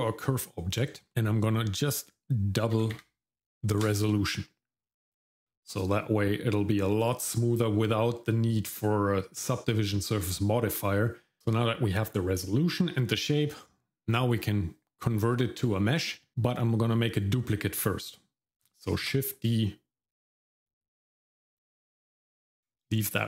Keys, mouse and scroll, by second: 1.9-3.8 drag, 19.0 shift+d.